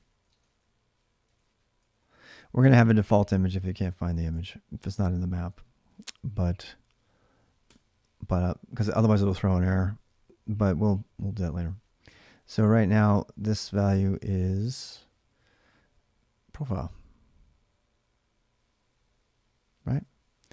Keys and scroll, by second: 0.0-7.4 typing, 3.9 ctrl+[, 13.1-15.0 typing.